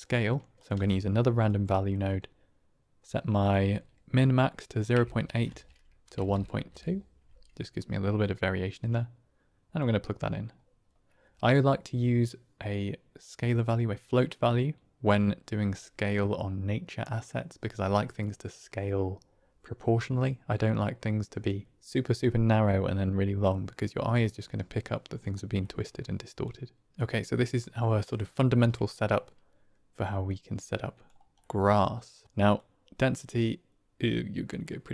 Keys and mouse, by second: 0.5 shift+click, 0.6 shift+d, 1.6 click, 3.3-7.2 drag, 8.2-9.7 drag, 13.2-15.0 drag, 25.6 middle click, 26.3-26.8 drag, 26.9 click, 28.7 middle click, 30.2 click, 31.3 middle click, 32.5-34.9 drag.